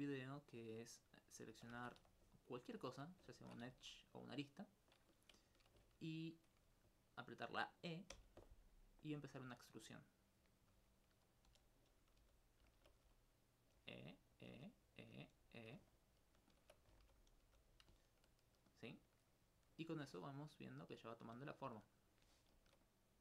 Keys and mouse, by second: 1.2 right click, 1.8 ctrl+Tab, 2.0 ctrl+2, 2.4 right click, 2.8 alt+click, 3.4 ctrl+Tab, 3.7 ctrl+1, 4.0-5.1 right drag, 5.2 shift+right click, 8.2 e, 9.6 click, 10.8 r, 11.3 click, 11.5 s, 12.2 g, 12.5 click, 12.8 alt+click, 13.1 alt+e, 13.6 click, 13.8 e, 14.4 click, 14.5 e, 15.0 click, 16.0 alt+click, 16.6 alt+shift+click, 17.4 click, 18.7 alt+click, 20.4 ctrl+alt+click.